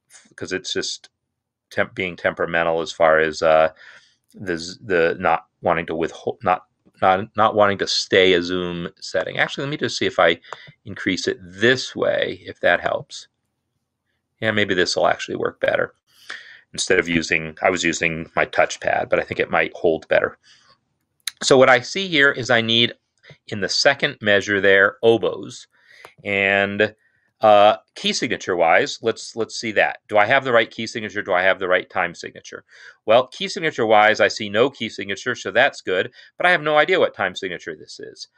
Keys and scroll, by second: 27.2 n, 28.0 Escape.